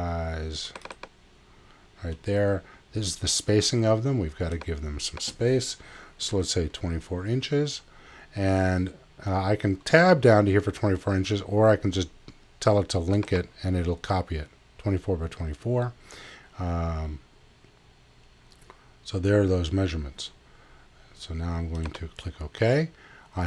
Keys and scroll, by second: 6.3 2, 6.6 4.